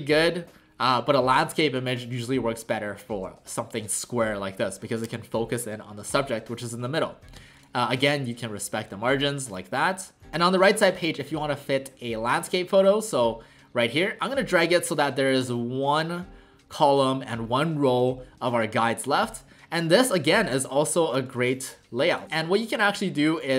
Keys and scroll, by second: 6.7 w, 7.4 w.